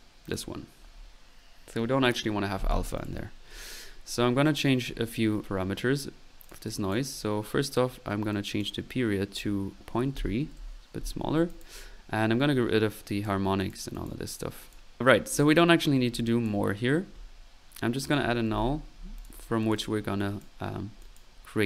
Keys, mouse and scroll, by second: 0.2 click, 3.0 click, 8.6 click, 11.5 drag, 11.8 middle click, 12.2 typing, 13.1-13.6 drag, 13.6 typing, 13.6 drag, 16.2 click, 16.5 typing, 18.1 right click, 18.7 typing, 19.2 drag.